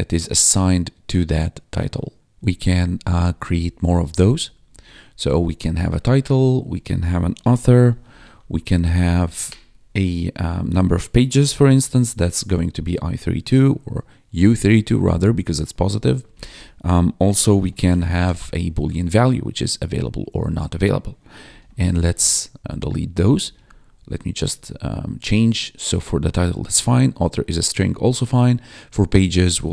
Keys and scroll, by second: 2.4 Left, 2.9 alt+shift+Down, 3.8 alt+shift+Up, 3.9 Left, 4.2 Left, 4.4 Up, 4.4 Left, 4.6 Up, 5.7 Right, 6.0 ctrl+shift+Left, 6.8-8.2 typing, 8.3 Down, 8.4 Left, 9.0 Right, 9.3 ctrl+shift+Left, 10.9-12.2 typing, 12.3 Down, 16.2 ctrl+shift+Left, 16.7-18.7 typing, 20.1 Down, 21.3 ctrl+shift+k, 21.9 ctrl+s, 22.1 Up, 22.9 Right, 23.1 Up, 23.3 Right, 23.3 Up, 23.5 Right, 24.1 ctrl+Right, 26.3 Down, 28.3 Down, 29.3 ctrl+shift+Left.